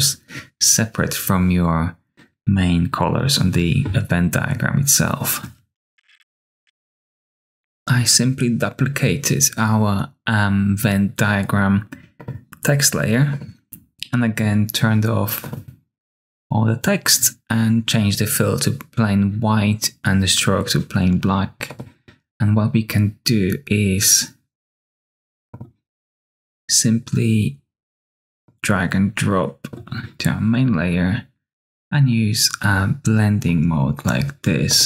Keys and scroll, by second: 5.9-7.1 typing.